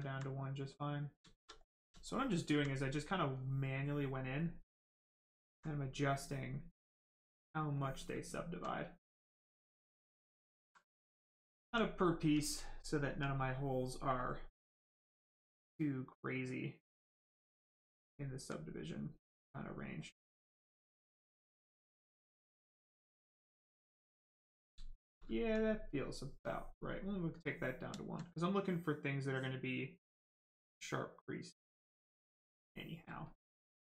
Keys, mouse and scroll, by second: 0.0 alt+right click, 0.9 right click, 0.9 right click, 1.1 shift+right click, 1.5 alt+right click, 5.1 alt+click, 6.9 click, 8.4 alt+right click, 10.7 right click, 11.5 alt+right click, 12.6 alt+click, 13.3 right click, 14.1 click, 15.8 right click, 17.5 alt+click, 18.1 alt+right click, 20.7 click, 23.7 right click, 24.7 shift+right click, 25.3 alt+right click, 26.9 click, 26.9 click, 27.9 alt+right click, 29.2 click, 29.3 click, 33.2 alt+click, 33.7 right click.